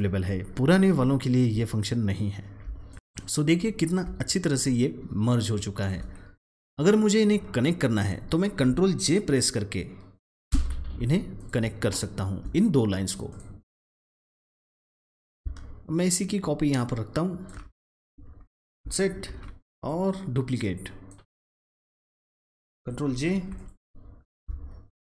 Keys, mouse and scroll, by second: 1.4 alt+Num_Lock, 1.4 alt+scroll down 1, 2.2-2.8 scroll down 2, 2.8 click, 3.6-4.3 scroll up 2, 4.6 space, 5.5 click, 5.5 space, 6.8-8.0 drag, 10.4 ctrl+j, 11.3 click, 11.7-12.0 alt+scroll down 1, 13.2-18.0 drag, 18.0-18.6 alt+scroll down 1, 19.2 ctrl+d, 19.7-23.0 drag, 23.4 ctrl+j.